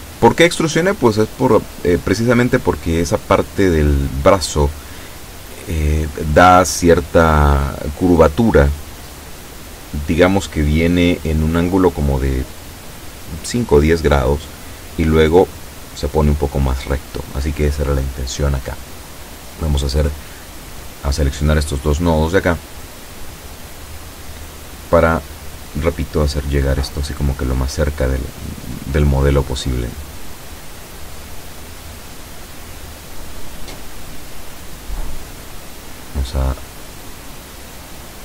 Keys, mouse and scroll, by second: 16.8 a, 17.6 b, 18.4-21.1 drag, 23.1-33.7 drag, 37.7 a.